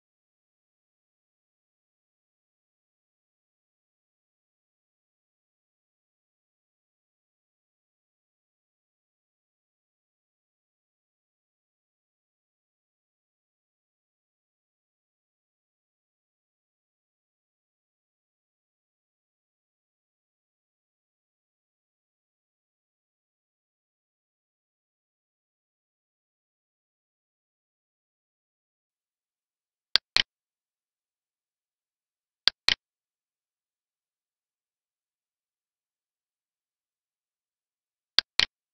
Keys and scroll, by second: 3.0 Down, 4.2 Right, 9.9 alt+e, 15.2 space, 15.5 space, 19.3 Tab, 23.9 Tab, 26.2 ctrl+s.